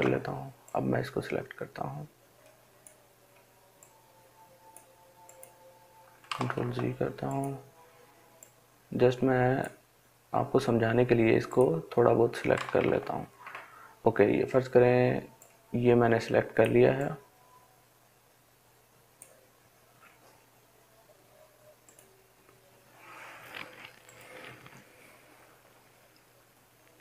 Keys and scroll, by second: 5.9 ctrl+z, 12.1 ctrl+z.